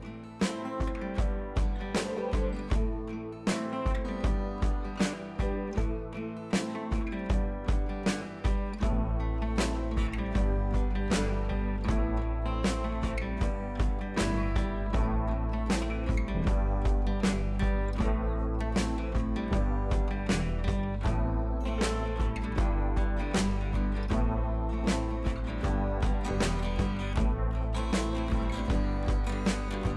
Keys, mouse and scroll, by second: 2.9 click, 5.0-5.4 click, 5.6 ctrl+c, 5.8 click, 6.4 ctrl+v, 6.9 click, 8.4 ctrl+z, 9.0-9.5 shift+drag, 12.1 ctrl+t, 12.6-13.1 drag, 16.0-19.0 drag, 24.7 click, 28.6 click.